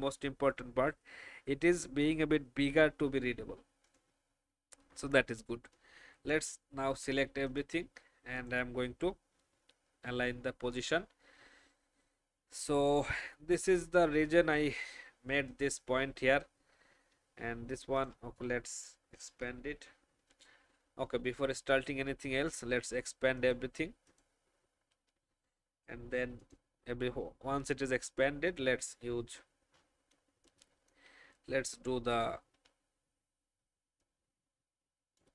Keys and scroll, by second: 0.2 ctrl+alt+2, 19.2 ctrl+alt+shift+2, 20.7 ctrl+alt+shift+2, 30.2 space.